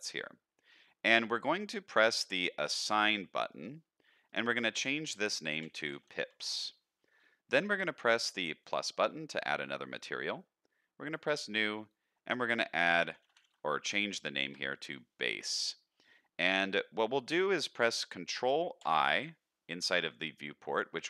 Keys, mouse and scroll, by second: 3.5 click, 4.2-6.5 drag, 8.6 click, 11.0 click, 11.8-14.5 drag, 18.8 ctrl+i.